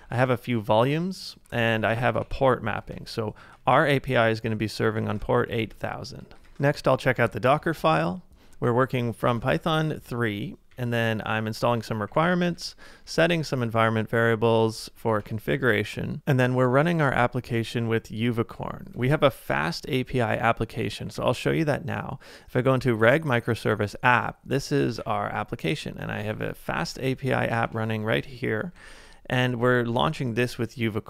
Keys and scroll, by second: 0.0-9.5 typing, 3.0 ctrl+c, 5.7 ctrl+c, 10.7-13.3 typing, 14.5 ctrl+c, 15.0-16.7 typing, 19.1 ctrl+w, 19.8 h, 21.1 typing, 22.8 Return, 23.7-27.6 typing, 28.8 ctrl+c.